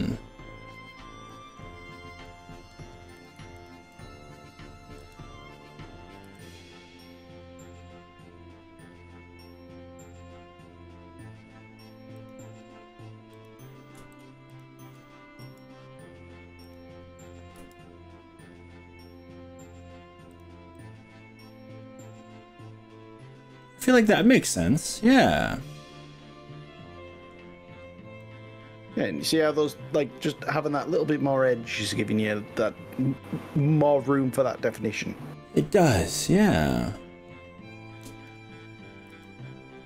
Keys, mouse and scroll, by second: 1.3 middle click, 1.8 scroll up 3, 2.3 middle click, 3.2 click, 5.1 KP_3, 6.3 g, 12.3 click, 13.4 click, 14.5 ctrl+click, 15.5 r, 16.7 click, 17.6 g, 20.3 click, 20.8-27.5 middle drag, 27.5-28.1 scroll down 3, 28.2-30.9 middle drag, 31.1-33.7 middle drag, 35.7-36.5 scroll up 6, 36.7-37.3 middle drag, 38.1 click, 39.1 g.